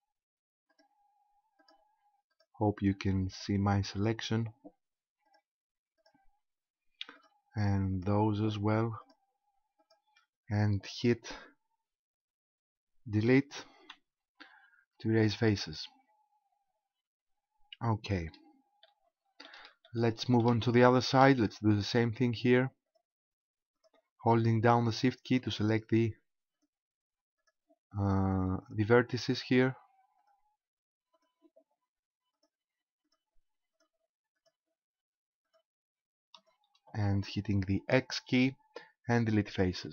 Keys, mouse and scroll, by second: 0.2 shift+right click, 1.6 shift+right click, 4.0 shift+right click, 7.2 shift+right click, 11.4 shift+right click, 13.8 Delete, 16.8-18.8 scroll down 3, 18.8 shift+middle click, 19.8 shift+middle click, 20.8 shift+middle click, 21.5-22.3 scroll up 4, 22.9 right click, 23.8 shift+right click, 24.8 shift+right click, 25.5 shift+right click, 26.6 shift+right click, 27.4 shift+right click, 28.6 shift+right click, 29.4 shift+right click, 30.2 shift+right click, 31.2 shift+right click, 32.4 shift+right click, 33.0 shift+right click, 33.8 shift+right click, 34.4 shift+right click, 35.4 shift+right click, 36.4 shift+right click, 38.0 x.